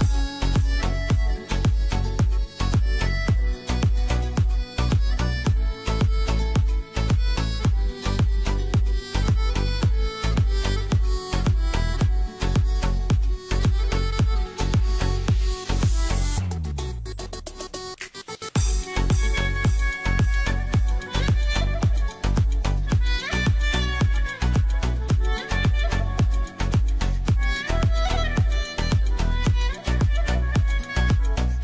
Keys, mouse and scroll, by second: 0.9 right click, 1.2-5.5 drag, 6.8 click, 8.3-9.0 typing, 19.2 click, 19.3-20.8 shift+drag, 20.8 right click, 21.3-31.6 drag.